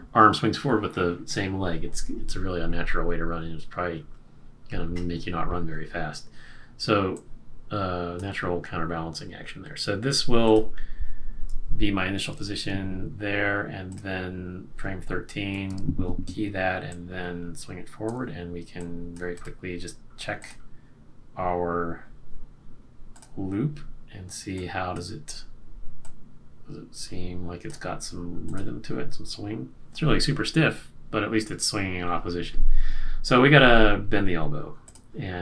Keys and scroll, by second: 12.1 shift+F6, 15.7 F6.